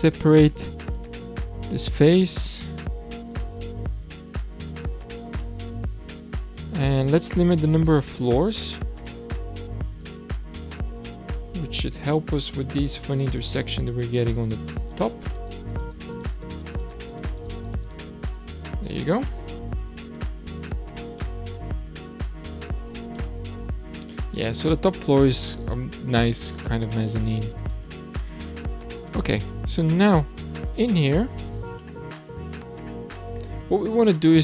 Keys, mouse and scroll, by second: 0.4 p, 3.3 click, 5.0-5.4 scroll up 2, 5.4-6.9 middle drag, 6.9-7.6 scroll up 2, 7.6 click, 8.5 Tab, 8.9 click, 10.0 click, 12.0 click, 13.2-20.9 drag, 20.9-21.2 scroll down 2, 21.2-22.8 middle drag, 22.8-23.2 scroll up 2, 23.2-24.3 middle drag, 24.3-24.8 scroll down 1, 24.8-25.8 scroll up 3, 25.8-26.7 scroll down 3, 26.7-27.6 middle drag, 27.6 click, 29.0 click, 29.7 Tab, 31.6 shift+scroll down 1, 31.8-34.2 shift+middle drag, 34.2 scroll down 1, 34.3-34.4 middle drag.